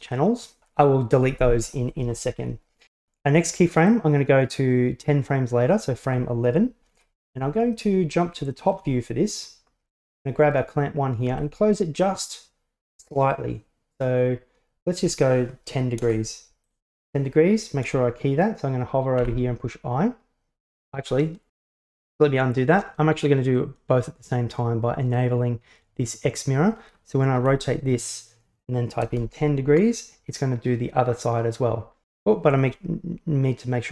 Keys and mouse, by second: 4.0-5.8 drag, 7.0 KP_7, 8.6 middle drag, 10.0-11.4 right drag, 11.4 r, 19.3 i, 20.9 ctrl+z, 23.7 click, 27.4 r.